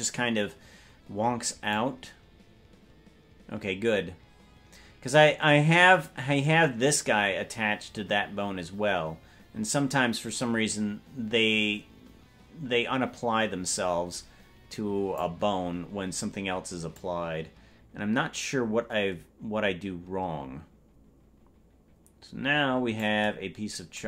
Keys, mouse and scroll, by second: 1.8-15.3 drag, 17.0-23.1 drag.